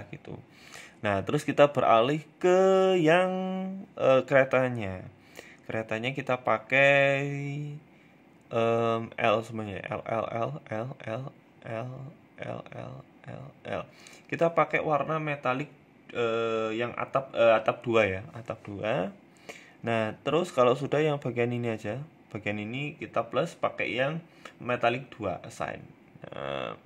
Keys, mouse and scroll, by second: 0.4-0.8 scroll up 1, 0.8 shift+middle click, 1.2 right click, 1.6 middle click, 1.9 Tab, 2.2 middle click, 2.7 middle click, 3.0 scroll up 2, 3.2 middle click, 3.8 shift+middle click, 5.6-8.2 l, 8.2 shift+middle click, 9.2 l, 9.3-13.8 l, 13.8 click, 16.8 click, 17.4-17.7 scroll down 5, 17.6 shift+middle click, 17.9 middle click, 18.2 scroll up 4, 18.5 middle click, 20.2 a, 20.2 a, 21.5 l, 22.5 click, 23.0 click, 25.1 Tab, 25.1 click, 25.3 middle click, 25.8 scroll down 3, 26.0 middle click.